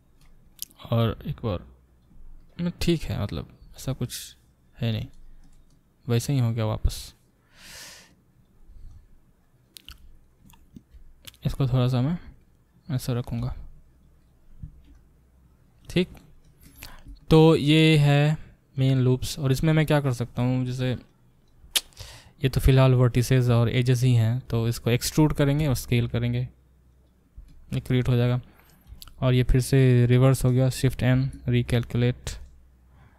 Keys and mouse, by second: 1.0 g, 11.3 click, 11.4 middle click, 11.5 click, 11.6-14.2 middle drag, 12.1 r, 13.4 g, 14.2 click, 14.6-31.8 alt+middle drag, 21.9 click, 22.1 click, 25.2 e, 31.1 shift+n, 31.8 click, 31.9-33.1 alt+middle drag.